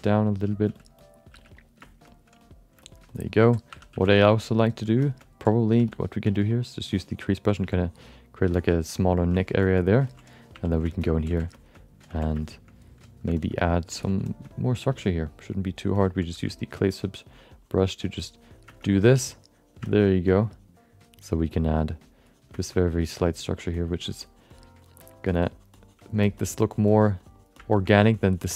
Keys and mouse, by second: 0.0-1.3 typing, 0.3 click, 1.0 click, 1.6 click, 1.8 alt+shift+middle click, 2.1 middle click, 2.4 click, 2.8 alt+shift+middle click, 3.1 alt+middle click, 3.7 2, 3.9 f, 4.2 shift+middle click, 4.4 alt+middle click, 5.0 alt+shift+middle click, 5.2 alt+middle click, 5.7 f, 6.2 f, 6.9 click, 7.6 f, 7.9 click, 8.5 ctrl+alt+middle click, 8.7 alt+middle click, 9.4 ctrl+middle click, 9.6 shift+middle click, 9.7 alt+middle click, 10.0 ctrl+middle click, 10.5 1, 10.8 shift+middle click, 11.0 middle click, 11.3 f, 11.5 alt+shift+middle click, 11.7 alt+middle click, 12.1 f, 12.4 alt+shift+middle click, 13.3 alt+shift+middle click, 13.6 alt+middle click, 13.9 ctrl+middle click, 14.2 shift+middle click, 14.4 alt+middle click, 14.9 f, 15.3 click, 15.5 click, 15.9 middle click, 16.3 f, 16.5 click, 17.3 click, 18.8 middle click, 19.1 click, 19.8 shift+middle click, 20.0 middle click, 21.3 click, 21.6 click, 22.1 click, 22.5 shift+middle click, 22.7 alt+middle click, 23.1 click, 23.8 click, 24.1 click, 24.2 click, 24.8 click, 26.2 shift+middle click, 26.3 middle click, 26.7 click, 27.7 shift+middle click, 27.9 alt+middle click, 28.2 click, 28.4 click.